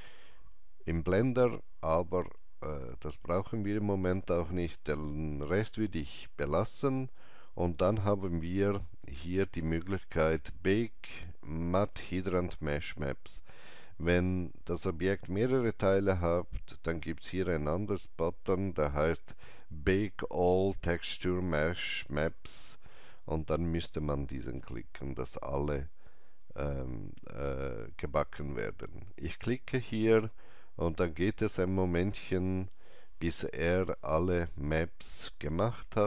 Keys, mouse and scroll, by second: 2.5 click, 2.5 scroll down 1, 4.4-5.3 scroll up 1, 29.3 click, 29.3 scroll up 1.